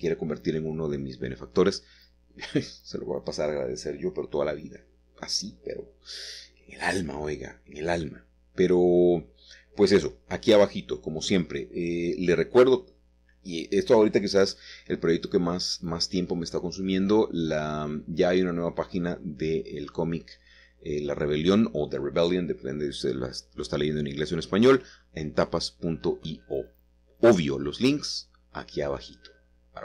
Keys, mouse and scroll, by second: 0.4 click, 1.8 click, 2.7 click, 3.2-4.6 drag, 4.7 x, 4.9 click, 5.6-6.8 scroll up 1, 6.8-7.3 scroll up 1, 7.3 click, 7.7 click, 8.3 typing, 8.4 click, 10.0 typing, 10.3 click, 11.1 click, 11.8 typing, 12.2-14.4 drag, 14.3 typing, 14.8-17.3 drag, 16.3 typing, 18.0-18.7 ctrl+z, 18.7 click, 19.8-20.6 typing, 20.0 click, 20.9 click, 21.7 typing, 21.9-22.9 drag, 23.4 click, 24.6 click, 25.3-28.1 scroll down 1, 27.6-29.8 middle drag.